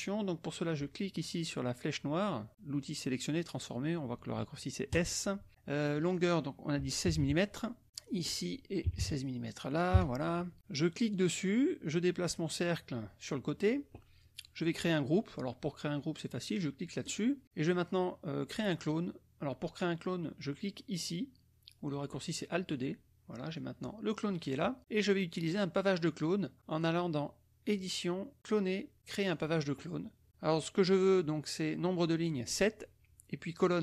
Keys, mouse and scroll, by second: 4.9 click, 5.9 click, 7.0 KP_1, 7.7 KP_6, 7.8 click, 8.1 click, 9.0 KP_6, 9.9 KP_Enter, 11.1-13.5 drag, 17.0 click, 22.7 click, 23.5-24.7 drag, 26.7 click, 29.4 click, 32.1 click.